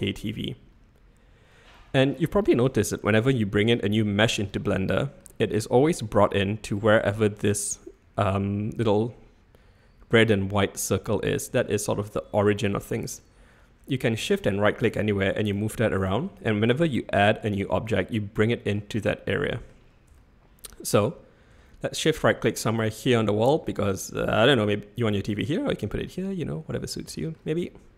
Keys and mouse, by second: 1.7-2.1 middle drag, 2.7-3.0 shift+middle drag, 3.1-3.5 middle drag, 4.0-4.4 shift+middle drag, 4.8-5.2 middle drag, 5.5-5.8 shift+middle drag, 6.0 middle drag, 6.7-7.1 middle drag, 11.6-11.9 shift+middle drag, 12.1-13.1 middle drag, 14.4 shift+right click, 14.9 shift+right click, 15.5 shift+right click, 15.9 shift+right click, 16.9 middle click, 18.0-18.7 shift+middle drag, 18.9-19.7 middle drag, 20.1-20.9 shift+middle drag, 25.1-25.4 middle drag, 26.1-26.9 middle drag, 27.1 shift+middle click, 27.6-27.9 middle drag.